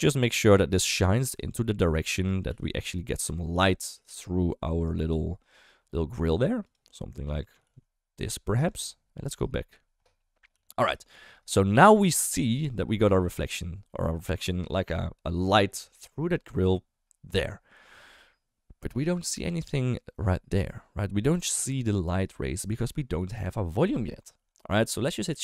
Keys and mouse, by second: 0.4 g, 0.8 r, 1.5 middle drag, 2.0 shift+middle drag, 2.4 r, 3.5 g, 4.3 middle click, 5.1 g, 5.7 r, 6.3 g, 6.8 middle click, 7.6 r, 9.4 KP_0, 10.5 g, 11.2 shift+middle drag, 12.4 shift+middle drag, 25.3 shift+a.